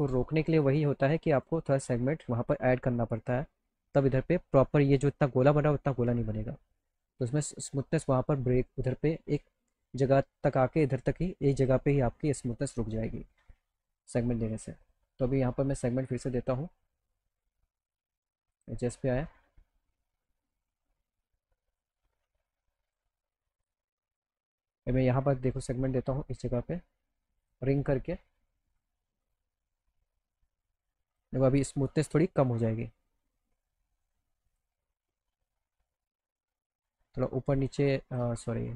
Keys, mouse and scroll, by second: 1.4 click, 2.2 alt+middle click, 5.5 alt+middle click, 14.5 click, 18.6 click, 20.6 click, 22.4 click, 23.5 click, 24.5 alt+middle click, 27.4 click, 28.7 click, 29.3 right click, 31.1 click, 32.8 alt+click, 34.5 click, 35.6 alt+middle click, 37.2 click, 38.3 ctrl+z.